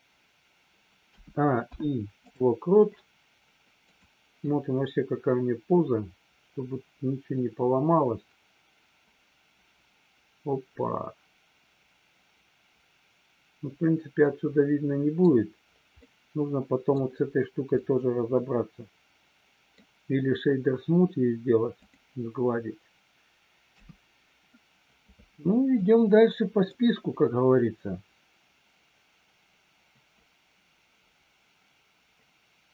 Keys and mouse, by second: 1.6 i, 3.9 click, 4.4-15.2 middle drag, 15.9-16.9 middle drag, 17.8-19.8 middle drag, 21.8 click, 23.6 KP_3, 25.8 middle click, 27.6-32.7 drag.